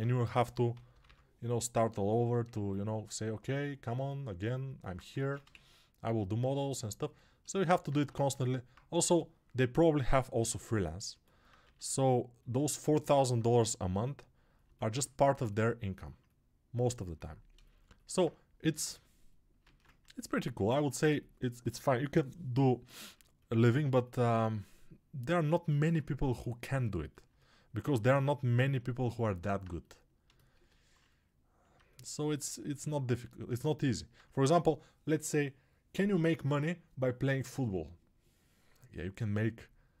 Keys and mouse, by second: 0.2 g, 0.6 ], 5.1 ctrl+Tab, 5.4 shift+a, 7.8 Tab, 10.3 g, 11.0-16.5 alt+middle drag, 11.5 s, 13.5 g, 16.5-19.5 drag, 18.6 g, 19.5-21.7 ctrl+middle drag, 19.5 ctrl+Tab, 21.7-30.8 drag, 30.8-40.0 right drag.